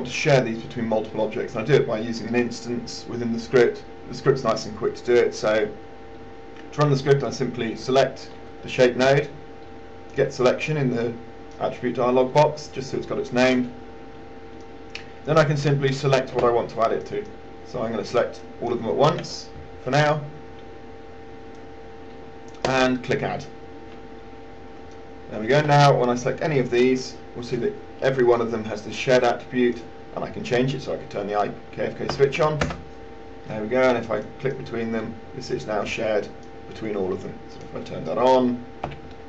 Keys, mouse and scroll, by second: 17.3 shift+click, 18.4 shift+click, 23.1 click, 25.3 alt+click, 26.5 click, 32.4 KP_1, 34.5-37.5 drag, 39.1 KP_1.